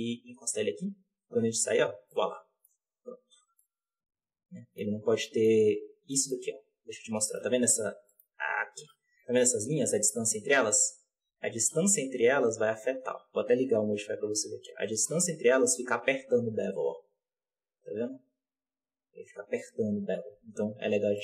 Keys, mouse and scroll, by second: 0.6 scroll down 2, 0.8 Tab, 1.8 scroll down 3, 1.8 z, 2.0-2.8 middle drag, 2.8-3.3 scroll up 4, 3.3 alt+a, 3.5-4.8 middle drag, 4.8 scroll up 3, 5.1-5.7 shift+middle drag, 5.7 Tab, 6.0-6.6 middle drag, 6.6-7.9 scroll up 8, 7.1 shift+middle drag, 7.9 g, 9.0 Tab, 9.5-10.8 scroll down 2, 10.8 Tab, 11.2 g, 13.9 click, 14.7 g, 21.0 g.